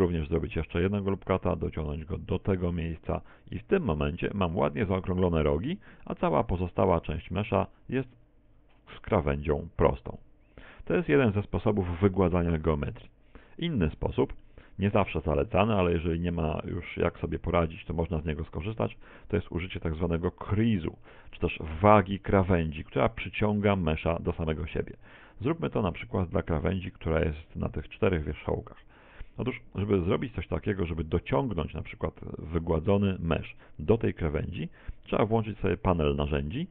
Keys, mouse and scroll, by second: 0.5 ctrl+r, 3.3 click, 3.8-4.5 scroll up 8, 4.5 Tab, 5.2-5.7 scroll up 2, 5.7-6.2 scroll down 3, 6.0 scroll up 1, 7.2-7.6 scroll down 7, 7.7 shift+middle click, 8.2-9.0 scroll down 1, 9.0 scroll down 1, 9.5 shift+middle click, 13.5 middle click, 14.2 middle click, 14.7 middle click, 15.5 middle click, 16.8 shift+middle click, 17.6 Tab, 18.5 scroll up 5, 20.1-20.7 scroll down 1, 20.7 scroll down 2, 23.6 middle click, 24.6-25.2 scroll up 2, 25.2 shift+middle click, 25.2 scroll up 2, 26.5 right click, 26.9 shift+right click, 27.8 right click, 28.1 shift+right click, 29.5 middle click, 30.5 middle click, 35.6 n.